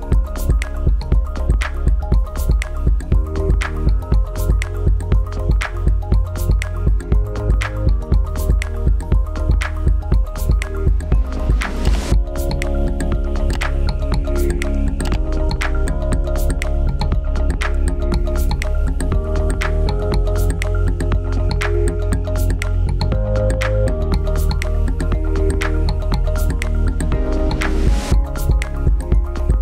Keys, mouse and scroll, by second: 12.4 click, 17.4 click, 20.9 click.